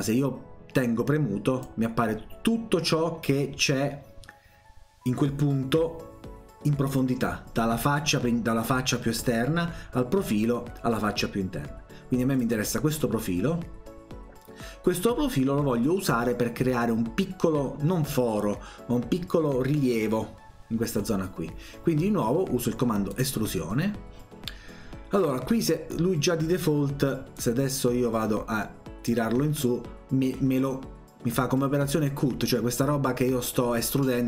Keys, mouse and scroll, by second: 0.7 click, 12.4 click, 23.1 click, 27.4-29.1 drag.